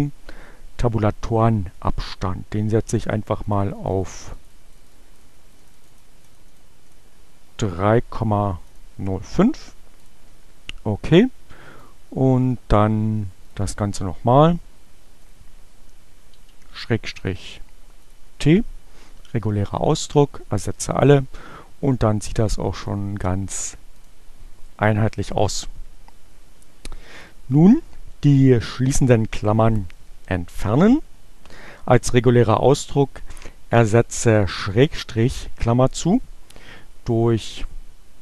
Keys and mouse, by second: 2.7-6.1 drag, 6.2 click, 8.6 click, 10.1 click, 11.9 click, 13.5 click, 15.3 click, 17.1 t, 18.1 click, 20.5 click, 22.7 click, 23.9 click.